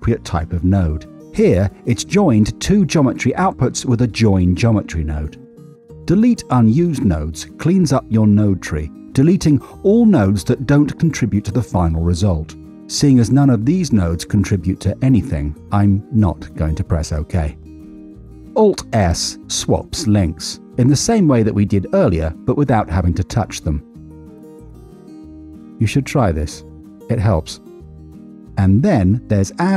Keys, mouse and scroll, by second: 4.9 middle click, 9.7 alt+x, 17.0 middle click, 17.7 middle click, 17.8 alt+s, 21.7 click, 24.2 alt+s, 24.7-25.8 alt+s, 25.9 alt+s, 26.0 alt+s, 26.1 alt+s, 26.2-28.3 alt+s.